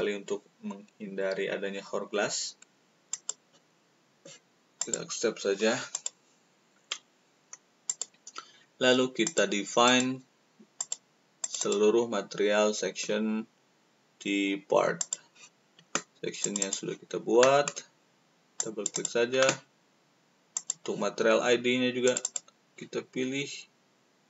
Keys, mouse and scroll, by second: 3.1 click, 4.7 click, 5.9 click, 7.8 click, 9.2 click, 9.8 click, 10.7 click, 11.4 click, 16.4 click, 18.5 click, 18.9 click, 20.5 click, 22.0 click.